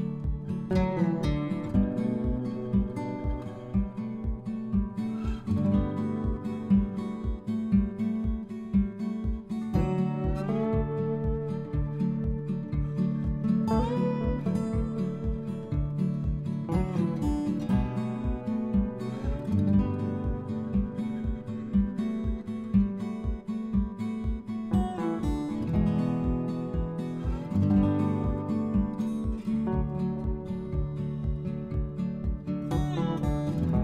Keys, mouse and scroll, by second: 0.2 click, 1.1 click, 1.6 click, 2.8 click, 3.7 Tab, 4.1 click, 7.4 middle click, 8.6 click, 9.9 click, 12.0 click, 17.1 click, 17.5 middle click, 18.7 click, 19.7 click, 20.4 click, 22.8 3, 24.8 click, 25.4 click, 27.0 click, 28.1 alt+Tab, 28.7 middle click, 32.0 middle click, 33.1 middle click.